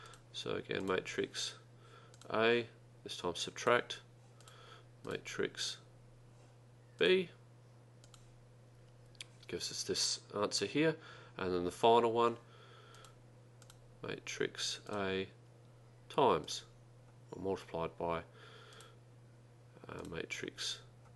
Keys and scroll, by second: 2.2 Return, 3.7 -, 7.1 2, 8.1 Return, 14.9 Return, 16.5 *.